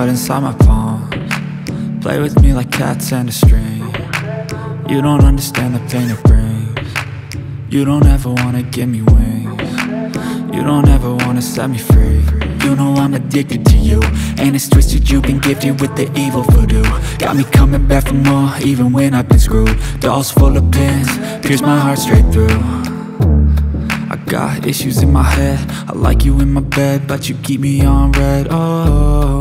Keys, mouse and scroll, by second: 4.7-5.0 alt+scroll down 1, 5.5 space, 5.6 click, 6.1 alt+scroll up 1, 7.6 click, 13.2-15.0 drag, 17.6 click, 18.8 Up, 26.2 click, 28.2 click.